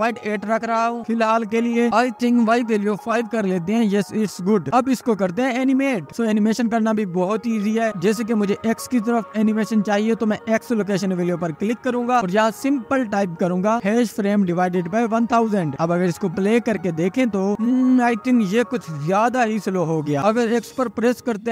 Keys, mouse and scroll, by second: 0.4-3.2 drag, 3.2 scroll up 9, 3.5-7.6 drag, 7.6-8.4 scroll up 1, 8.4-8.9 scroll up 1, 8.9-9.7 scroll down 2, 9.7 middle click, 10.4-10.8 scroll up 2, 16.0-17.9 drag, 21.1 space, 21.4 middle click, 21.4-21.5 scroll down 2.